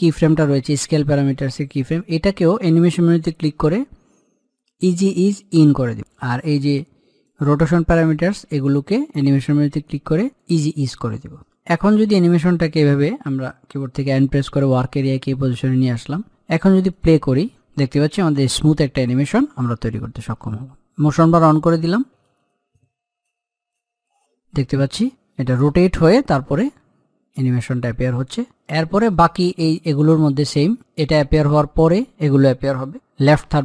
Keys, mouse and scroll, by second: 5.2-8.8 drag, 11.9 click, 14.1 n, 16.6 click, 28.7 middle click, 29.7 click.